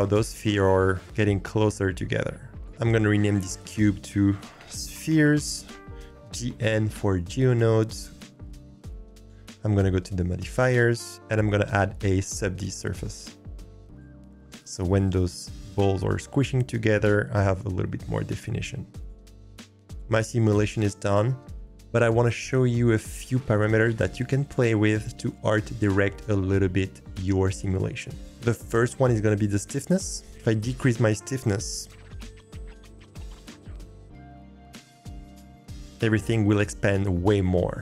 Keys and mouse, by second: 3.7-6.9 drag, 13.9 click, 15.2 click, 19.2 click, 30.3-32.4 drag.